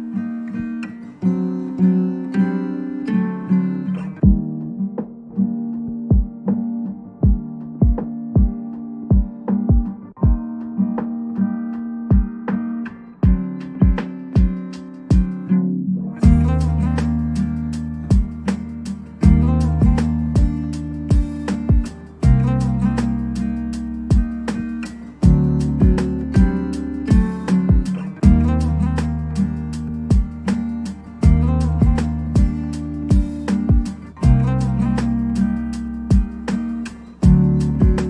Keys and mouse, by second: 0.5 ctrl+s, 0.5 shift+a, 1.1 KP_Divide, 2.0-5.8 typing, 2.1 click, 2.5 click, 4.1 middle click, 4.2 Tab, 5.0 Tab, 5.3 Tab, 5.4 shift+middle click, 5.8 Tab, 6.1 click, 6.6 click, 6.9-8.9 typing, 8.1 drag, 10.0-13.4 typing, 10.4 drag, 10.8 click, 11.3 Return, 11.6 click, 13.1 click, 13.8 click, 14.9-16.4 typing, 15.2 Return, 16.2 Tab, 17.2 Tab, 18.4 g, 18.4 z, 19.0 ctrl+s, 19.0 middle drag, 19.3 middle click, 20.3-20.7 shift+drag, 20.7 middle click, 20.9 g, 20.9 y, 21.2 shift+middle click, 21.4 g, 21.4 y, 21.6 ctrl+s, 21.7 shift+middle click, 21.8 click, 23.5-29.2 typing, 23.5 click, 23.7 KP_Divide, 24.6 click, 25.1 Tab, 27.2 middle click, 29.6 middle click, 30.5 shift+click, 30.8 middle click, 30.9-35.9 typing, 31.3 ctrl+z, 31.4 middle click, 31.6 middle click, 32.3 Tab, 32.5 Tab, 32.7 middle click, 33.3 Tab, 33.5 right drag, 33.9 Return, 34.7 click, 35.0 click, 35.7 shift+click, 36.1 click, 37.1 Tab, 37.6-38.0 typing, 37.8 click.